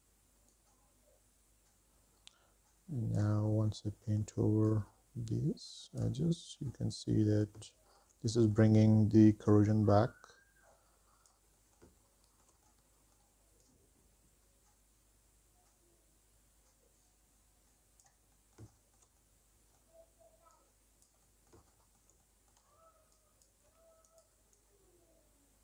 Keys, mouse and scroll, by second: 0.7-3.6 drag, 3.9 shift+middle click, 4.9-6.4 drag, 6.6 middle click, 7.0-7.4 scroll down 2, 7.4 middle click, 7.9 shift+middle click, 8.6 middle click, 9.7-11.2 drag, 11.4 middle click, 11.5 shift+middle click, 11.7 middle click, 12.0-13.5 drag, 13.6 shift+middle click, 13.9 middle click, 14.3 click, 14.6 middle click, 14.7 shift+middle click, 14.9 middle click, 15.1 f, 15.4 f, 15.7-16.7 drag, 16.8 middle click, 17.0 middle click, 17.3 click, 18.0 middle click, 18.3 shift+middle click, 18.8-19.9 drag, 19.9 middle click, 20.4 click, 20.9 middle click, 21.2 shift+middle click, 21.4-23.1 drag, 23.2 middle click, 23.5 shift+middle click, 23.9 middle click, 24.1 click, 24.8 middle click, 25.0 shift+middle click, 25.2 scroll down 3, 25.5 middle click.